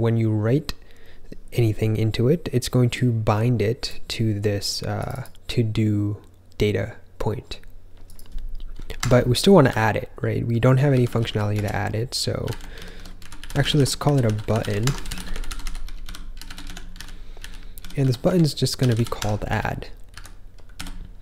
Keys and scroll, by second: 8.9 Escape, 9.6 o, 10.8-15.0 typing, 18.6-20.7 typing.